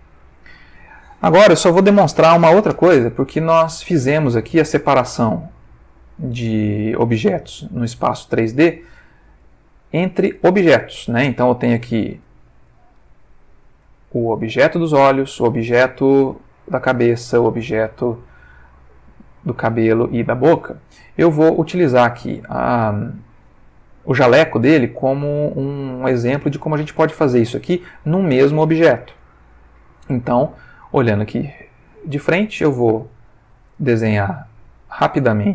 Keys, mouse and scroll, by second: 0.2 click, 3.5 ctrl+middle click, 4.3-9.2 ctrl+middle drag, 9.3 Tab, 10.0 click, 10.5 Tab, 11.3 Tab, 12.1 Tab, 13.9 click, 14.4 click, 15.5 click, 16.3 g, 16.8 Escape, 17.5 click, 17.7 g, 18.2 Escape, 19.2 click, 19.7 g, 20.1 Escape, 20.6-21.6 middle drag, 22.0-22.6 shift+middle drag, 26.1 ctrl+middle click, 31.4 click, 32.4-33.7 ctrl+middle drag, 34.3 click, 35.1-35.5 ctrl+middle drag.